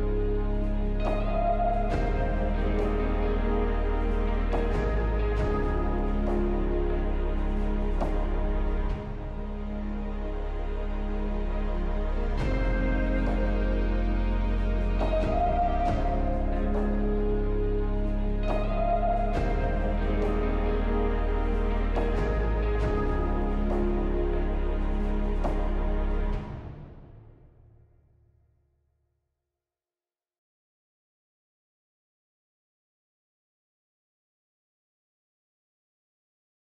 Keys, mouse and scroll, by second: 7.7 middle click, 8.0 ctrl+a, 14.3 middle click, 21.4 alt+middle click, 25.3 middle click.